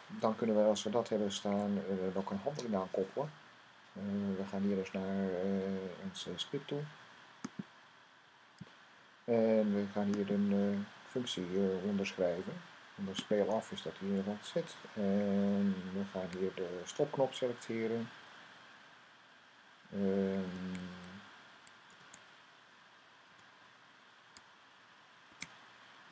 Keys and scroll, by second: 1.3 super+s, 20.3 shift+4, 21.6 typing, 23.1 typing, 25.0-26.1 typing.